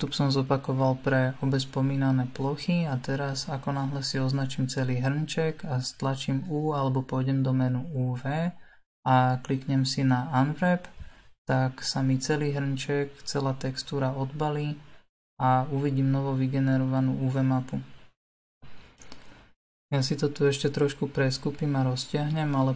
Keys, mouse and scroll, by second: 0.2 middle click, 0.9-1.9 scroll down 5, 1.9-4.2 middle drag, 4.2 a, 8.5 u, 10.6 l, 11.7 g, 14.8 s, 17.4 r, 20.7 g.